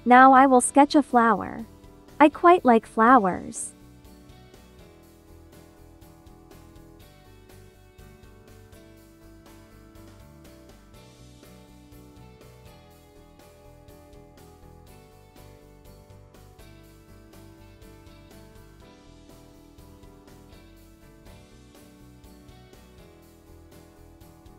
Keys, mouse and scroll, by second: 0.5 space, 5.0-23.7 drag.